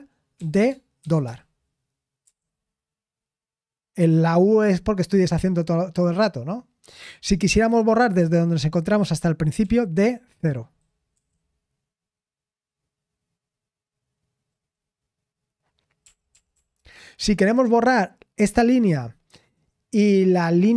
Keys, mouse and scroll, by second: 18.2 typing.